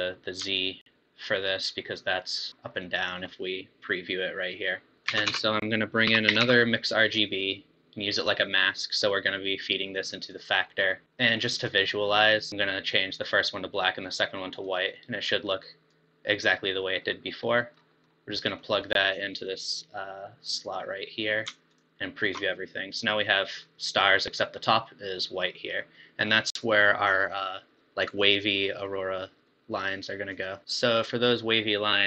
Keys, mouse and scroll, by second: 0.7 ctrl+shift+click, 1.5 ctrl+shift+click, 2.4 ctrl+shift+click, 3.5-4.9 middle drag, 5.1 shift+a, 9.6 drag, 10.8 middle click, 11.0 click, 12.5 click, 14.6 click, 17.1-19.6 middle drag, 19.6 click, 21.9 ctrl+shift+click, 23.0-30.8 middle drag, 30.8 click.